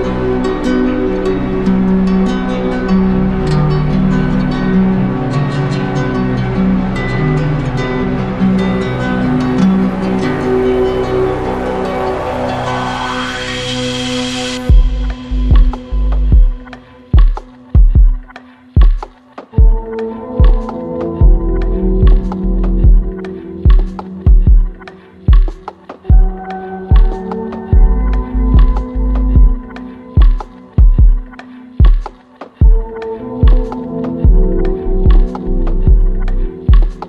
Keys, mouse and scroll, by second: 7.4-8.5 drag, 11.5-12.5 drag, 13.4-14.5 drag, 31.7-32.8 drag, 36.0 z.